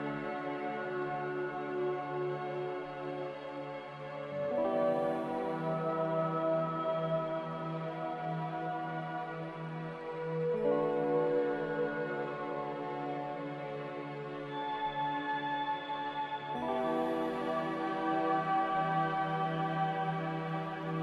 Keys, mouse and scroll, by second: 2.9 z, 4.3 1, 4.5 Return, 6.4-8.5 typing, 14.3 g, 17.2 z, 19.9 a.